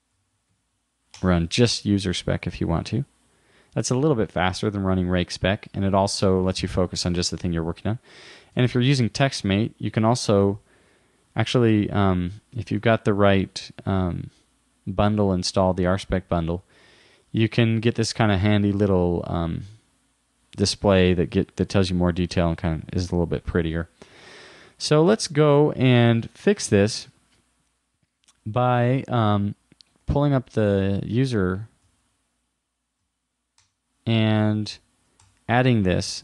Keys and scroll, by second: 8.6 super+Tab, 10.4 super+r, 25.1 super+w, 30.0 super+t, 34.9 super+Right.